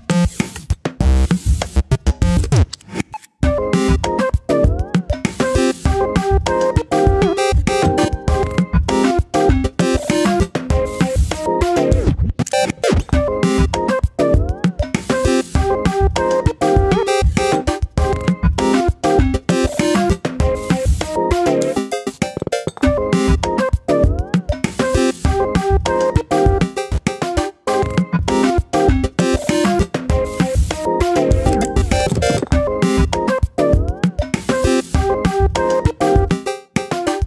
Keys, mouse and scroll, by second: 1.9 alt+e, 5.8 g, 7.8 scroll up 1, 8.1 shift+middle click, 9.1 typing, 9.9 click, 10.5 alt+click, 11.4 g, 12.6-14.1 middle drag, 14.1 g, 15.2 middle click, 15.9-16.3 scroll down 1, 16.3-17.4 middle drag, 17.4 `, 18.1-18.9 scroll up 1, 18.9 ctrl+r, 23.7 ctrl+r, 25.2 middle click, 25.9 3, 26.9 middle click, 27.2 click, 28.1 e, 31.0-31.4 scroll down 1, 31.4 Tab, 32.4 click, 33.1 click, 34.0 click, 34.4-35.7 scroll up 1, 35.7-37.2 drag.